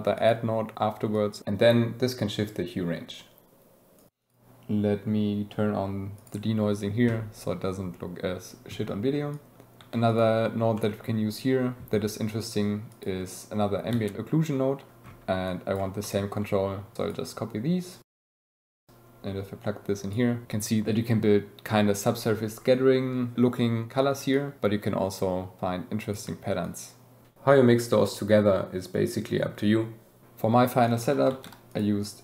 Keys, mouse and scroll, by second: 0.5 middle click, 3.1-4.2 middle drag, 9.8 g, 10.1 click, 10.8 click, 13.9 shift+d, 16.0 click, 20.1 middle click, 20.4 middle click, 26.6 shift+click, 30.8 click, 31.7 click.